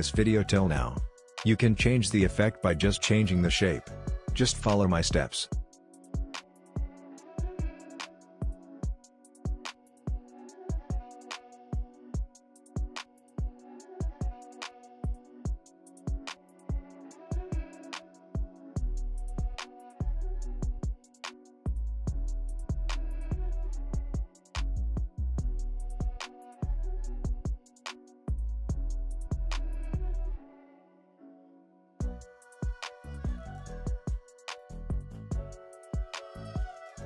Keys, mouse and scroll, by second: 2.1 click, 4.1 click, 9.1 ctrl+z, 9.5-15.1 drag, 15.1 space, 16.9-25.6 drag, 25.6 space, 27.5-28.7 drag, 29.7 scroll down 1, 32.3-36.9 drag, 36.9-37.0 scroll down 1.